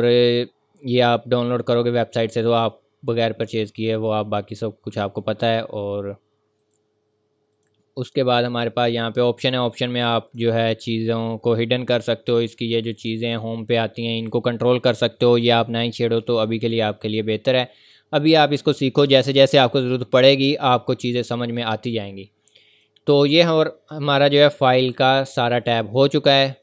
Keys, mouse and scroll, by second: 6.6 click, 11.0-11.9 scroll down 1, 11.9 click, 17.0 click, 20.6-21.0 scroll up 1, 21.0-21.6 scroll down 1, 21.6 scroll up 1, 22.7 click, 23.4-24.3 scroll down 1, 24.9 click.